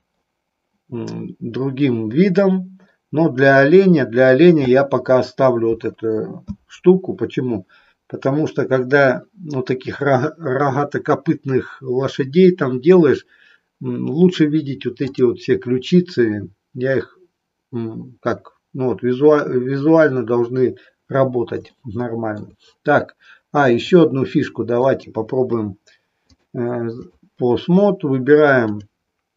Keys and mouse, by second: 14.9 click, 21.8 shift+middle click, 23.8 click, 24.9 click, 26.3 click, 28.6 click.